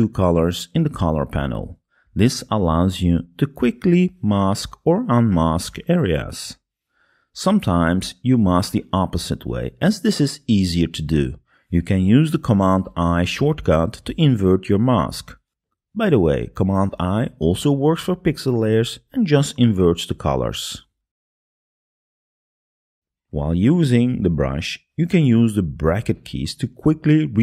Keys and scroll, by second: 0.4 x, 16.5 super+i, 23.2 super+i, 27.1 [.